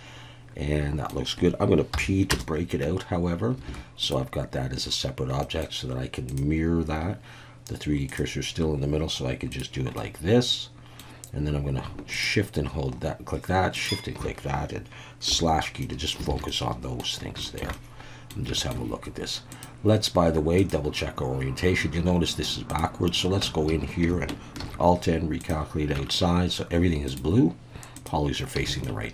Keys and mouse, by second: 1.9 p, 2.8 Tab, 3.7 alt+a, 4.0 click, 5.4 middle click, 6.4-8.2 drag, 9.5 click, 10.0-11.0 middle drag, 12.2 shift+click, 15.3 /, 15.8 middle drag, 16.3 alt+a, 16.5-17.0 middle drag, 17.4 shift+middle drag, 17.7-18.3 middle drag, 18.6 shift+middle drag, 19.7-21.3 drag, 22.7 click, 23.4 Tab, 23.7 a, 24.6 alt+n, 26.0 Tab, 27.1-28.4 drag, 28.7 alt+a, 28.8-29.1 middle drag.